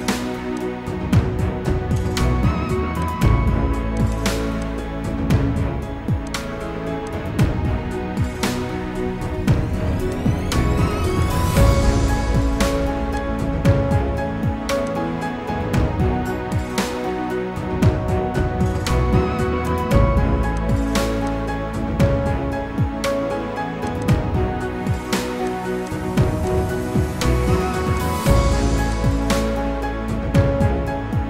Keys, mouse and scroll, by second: 4.0 double click, 5.7 Return, 5.7 2, 7.0 ctrl+click, 8.5 ctrl+g, 10.0 ctrl+click, 13.1 ctrl+click, 24.0 double click.